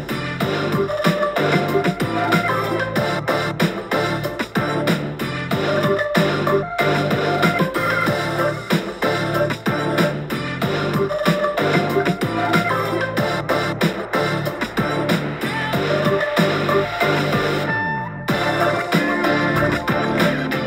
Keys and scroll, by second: 3.2 super+z, 4.1 super+j, 4.2 super+j, 4.4 super+t, 5.9 super+t, 7.9 super+t, 8.1 Page_Up, 8.3 Page_Up, 12.9 v, 14.7 b, 17.2 typing, 17.7 super+t.